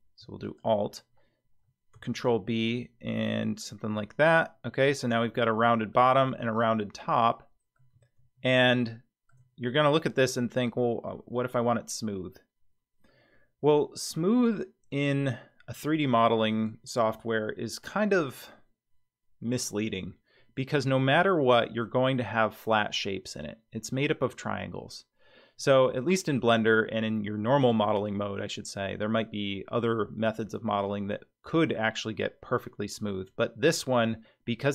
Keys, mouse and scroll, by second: 0.4 alt+click, 2.2 ctrl+b, 3.6-5.3 drag, 3.9-5.1 middle drag, 5.3 Tab, 5.9-6.6 middle drag, 6.7-7.0 scroll down 3, 7.2-7.8 middle drag, 8.3-8.7 scroll up 3, 8.9-9.3 shift+middle drag, 9.7-10.2 middle drag, 12.0-12.7 scroll up 2, 13.1-13.8 middle drag, 14.3-14.9 scroll up 2, 15.1-15.8 shift+middle drag, 25.5 scroll up 2.